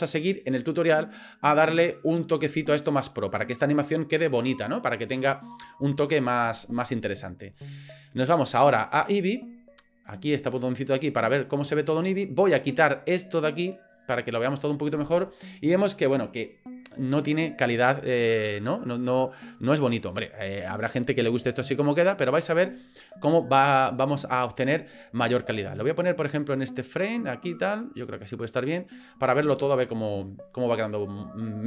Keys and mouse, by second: 9.0 click, 13.9 click, 19.1-20.1 drag, 26.2-28.8 drag.